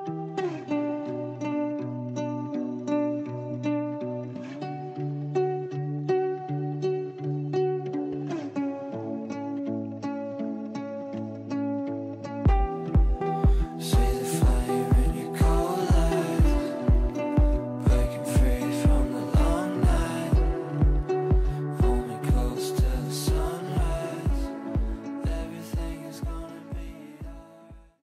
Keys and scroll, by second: 5.4 g, 10.0 g.